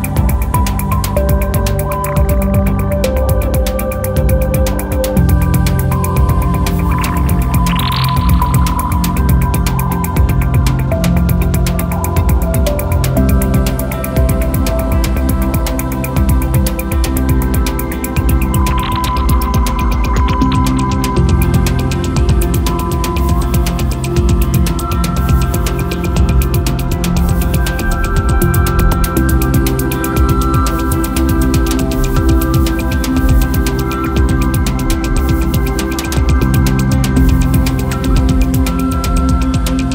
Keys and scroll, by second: 2.1 f, 10.6-11.5 typing, 16.9 Return.